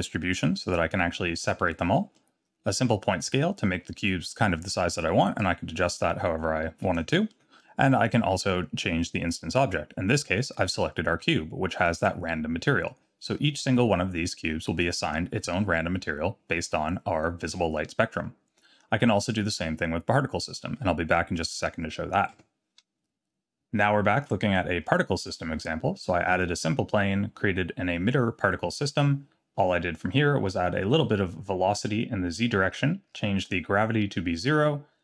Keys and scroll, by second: 22.3 Tab.